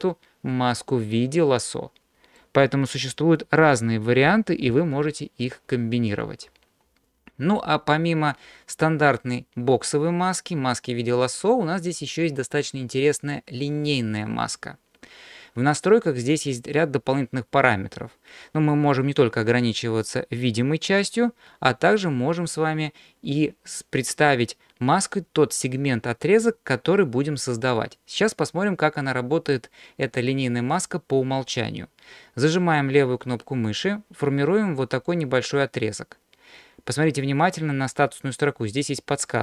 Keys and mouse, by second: 1.0-2.4 middle drag, 4.7 alt+m, 9.2-14.0 drag, 33.7-39.4 drag.